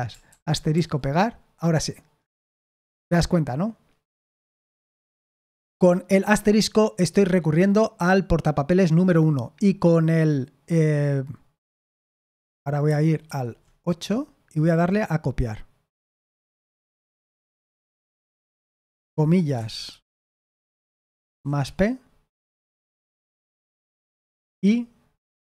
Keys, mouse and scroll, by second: 5.1 typing, 12.8 super+7, 13.2 super+8, 17.3 super+7, 18.2 o, 20.2 shift+', 21.6 typing, 24.0-25.4 typing, 25.3 Escape.